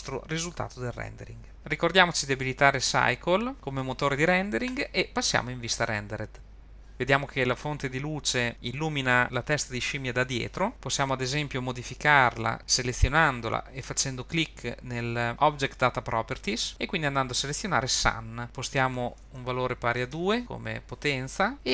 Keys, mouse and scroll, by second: 1.6 click, 3.0 click, 3.5 click, 6.6 click, 12.5 click, 18.4 click, 19.5-20.5 drag.